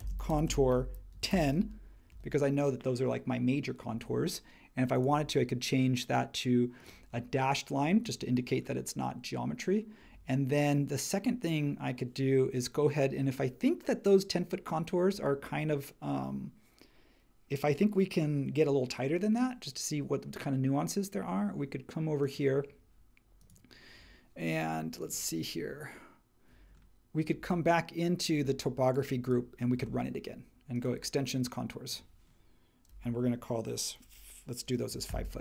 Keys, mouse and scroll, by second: 0.0-1.3 typing, 2.1 Return, 34.6-35.4 typing.